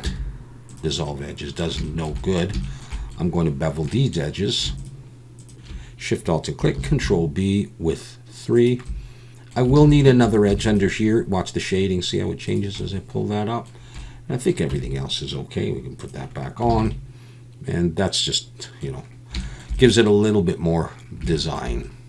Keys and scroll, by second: 0.0 x, 6.7 ctrl+b, 9.8 alt+a, 10.5 ctrl+r, 14.7 Tab, 16.7 alt+a.